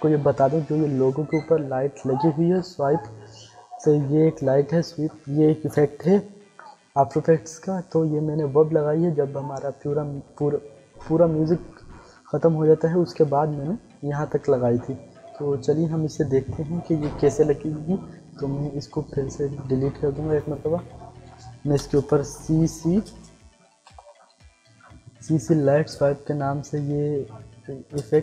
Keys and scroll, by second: 6.0 u, 20.7 Delete, 21.7 ctrl+space, 22.3 c, 23.0 space, 23.7 l, 24.0 i, 25.2 Down, 28.0 Return.